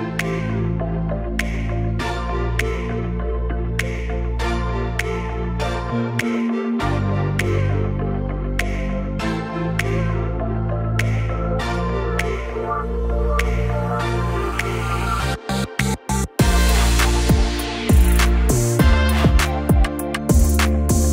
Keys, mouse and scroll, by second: 0.0-1.0 typing, 2.2 click, 4.1 shift+i, 4.6 Return, 6.0 click, 6.7-7.9 typing, 9.6 middle click, 11.1-11.8 typing, 11.3-15.7 drag, 17.3-19.6 drag, 20.3 typing, 20.8 Return.